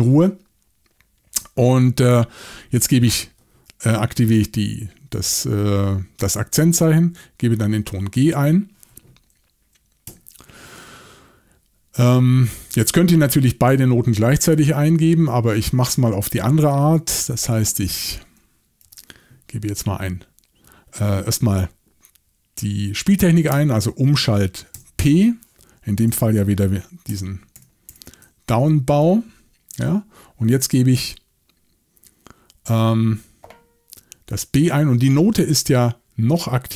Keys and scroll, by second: 2.1 ü, 10.1 Right, 17.1 6, 18.8 ü, 24.7 p, 26.1-28.4 typing, 28.6 Return, 29.0 Return.